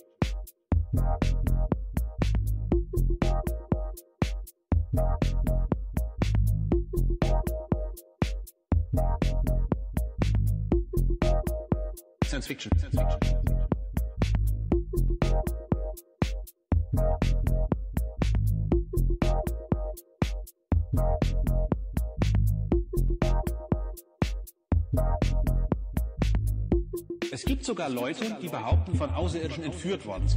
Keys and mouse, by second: 1.5 click, 4.0 click, 4.8-6.7 drag, 11.3-14.4 drag, 15.6 click, 16.1 click, 17.2 click, 17.4 click, 18.8 click, 20.1-20.9 drag, 23.2 click, 25.0-28.9 drag, 29.3-30.3 drag.